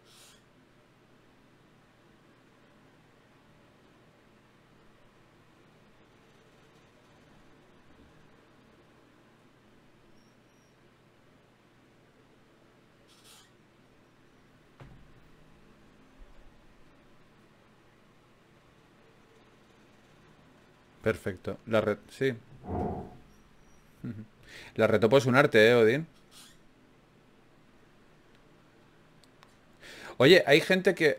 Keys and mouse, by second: 0.3-1.3 middle drag, 0.3 e, 1.9 s, 3.5 g, 5.1 middle click, 5.6 g, 10.1 ctrl+r, 14.6 ctrl+r, 17.4-19.8 drag, 19.8 Tab, 22.6-23.6 drag, 23.6 Tab, 24.2 click, 30.0 ctrl+Tab, 31.0-31.1 drag.